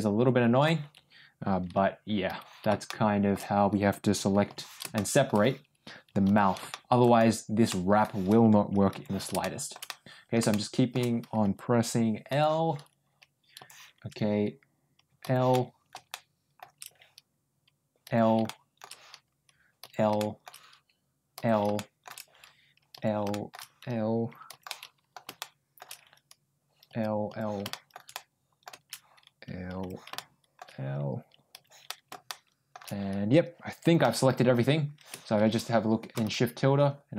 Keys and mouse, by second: 2.2 l, 2.8 middle click, 4.4 l, 4.8 middle click, 6.2 l, 6.6 middle click, 7.6 middle click, 8.8 l, 9.3 middle click, 9.8 middle click, 10.4 middle click, 13.5 l, 15.1 l, 15.4 middle click, 16.0 middle click, 18.0 l, 18.3 middle click, 19.7 l, 20.1 middle click, 21.3 l, 21.6 middle click, 22.8 l, 23.2 middle click, 24.4 l, 24.6 middle click, 25.3 middle click, 26.8 l, 27.2 l, 27.6 shift+middle click, 28.0 middle click, 29.7 l, 30.0 middle click, 31.5 l, 31.8 shift+middle click, 33.7 l, 33.9 middle click.